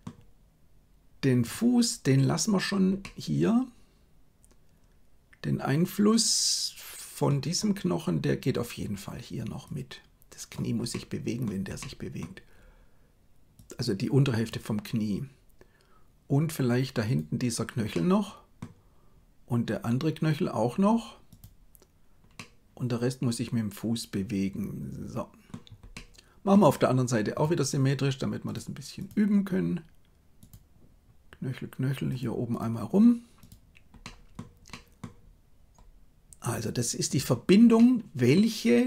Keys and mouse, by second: 3.0-7.3 middle drag, 9.7 click, 10.8 middle click, 11.7 middle click, 13.7 click, 17.1 click, 17.9 middle click, 21.3 click, 22.5-25.4 middle drag, 25.9 middle click, 28.9 click, 30.3 click, 32.5 click, 33.4 click, 34.0 middle click, 34.6 middle click, 36.4 click, 37.0 click, 37.7 middle click.